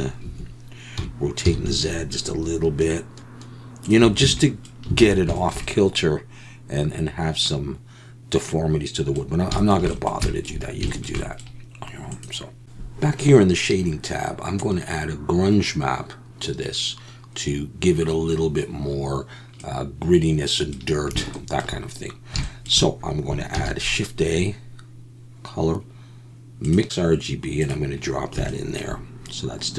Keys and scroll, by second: 0.2 Escape, 1.0 r, 1.4 z, 4.2 Tab, 5.0 alt+a.